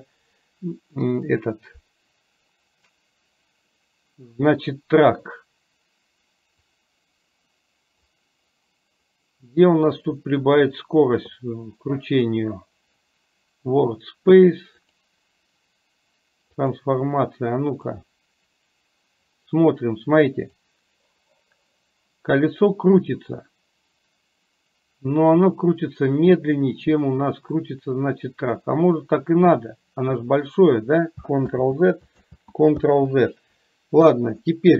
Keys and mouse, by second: 6.7-8.1 drag, 20.6-30.6 drag, 31.6 ctrl+z, 32.4 ctrl+z, 32.9 ctrl+shift+z.